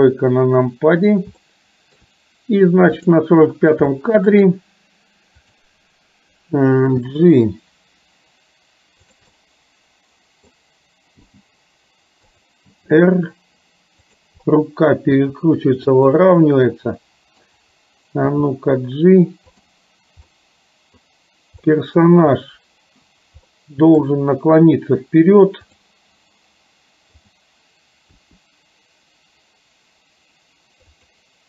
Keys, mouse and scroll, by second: 1.4-2.1 shift+middle drag, 3.1 click, 3.9-4.3 shift+middle drag, 5.7 click, 7.1 g, 9.3-10.6 middle drag, 11.3 g, 12.8 r, 14.6 middle click, 15.2 r, 16.4-17.4 middle drag, 18.3 g, 20.4 middle click, 21.8 scroll up 1, 22.1-23.6 scroll down 1, 23.6 middle click, 25.7 click, 27.2 click, 28.2 r.